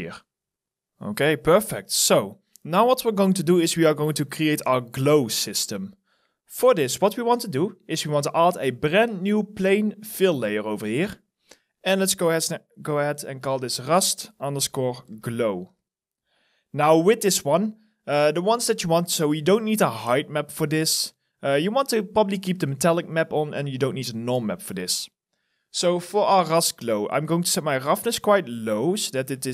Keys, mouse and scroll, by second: 3.5 alt+click, 4.8 alt+middle click, 6.7-8.8 scroll up 1, 11.4 double click, 13.2-16.0 typing, 20.2-21.3 scroll down 1, 24.4-26.4 scroll down 1.